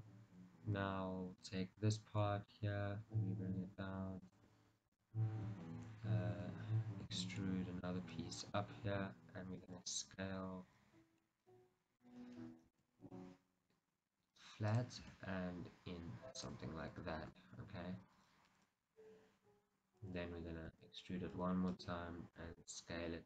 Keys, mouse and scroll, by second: 1.6 alt+click, 2.3 g, 4.5 middle click, 4.6 click, 5.1 o, 7.2 e, 9.8-11.3 drag, 11.3-15.0 middle drag, 12.8 s, 15.0 click, 15.2 s, 16.6 click, 17.4 KP_1, 19.1 scroll up 1, 20.8 e, 21.9 click, 22.6 s.